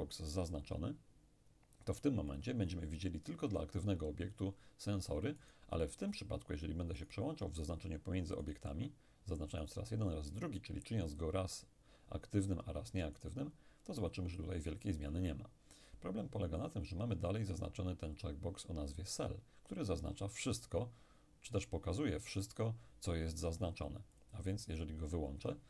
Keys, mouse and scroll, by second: 2.4 click, 5.5 shift+right click, 7.0 shift+right click, 8.5-10.6 shift+right drag, 13.2 shift+right click, 24.2 click.